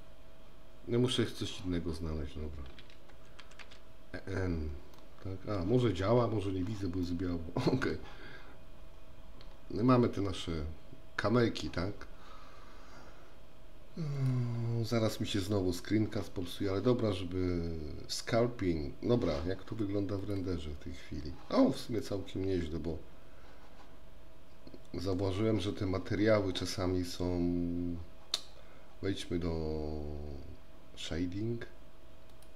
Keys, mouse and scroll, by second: 3.6 n, 5.0-5.6 middle drag, 7.1-8.0 middle drag, 14.3 click, 22.2-25.2 middle drag.